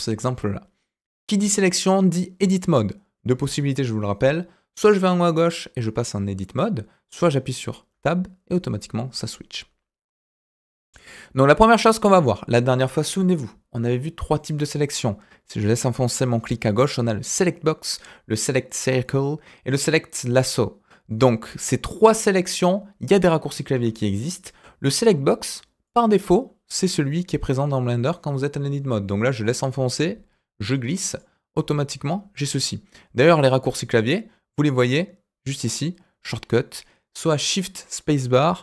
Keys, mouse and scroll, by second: 4.7-6.6 drag, 7.9 Tab, 10.4-12.3 middle drag, 14.3-23.7 drag, 25.8 click, 29.3-31.1 drag.